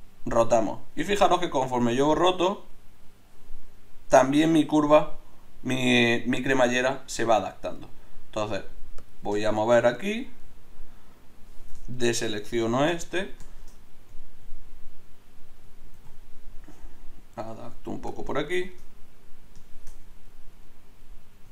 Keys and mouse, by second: 11.9-13.2 drag, 13.2 middle click, 13.5 middle click, 14.0 middle click, 15.9 ctrl+t, 20.5-21.5 drag.